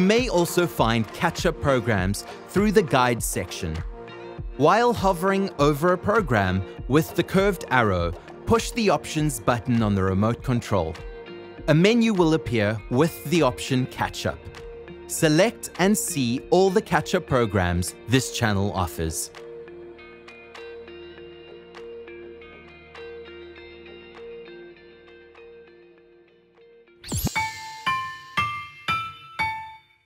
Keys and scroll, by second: 10.0 Menu, 11.0 Menu, 11.9 Menu.